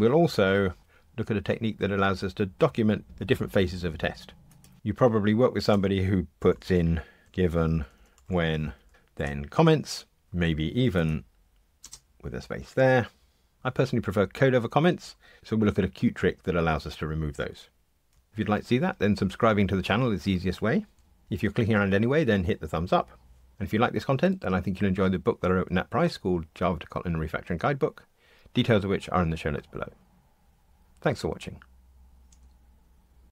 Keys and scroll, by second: 9.2 Escape.